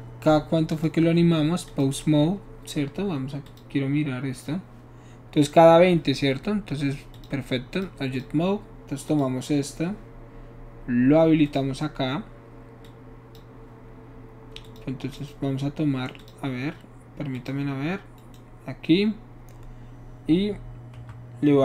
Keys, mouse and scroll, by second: 0.7 click, 1.7 click, 3.4 click, 7.1 click, 7.7 click, 8.1 click, 9.1 click, 11.5 click, 12.8 click, 14.6 click, 15.2 right click, 16.2 click, 17.3 click, 18.2 right click, 21.1 Escape.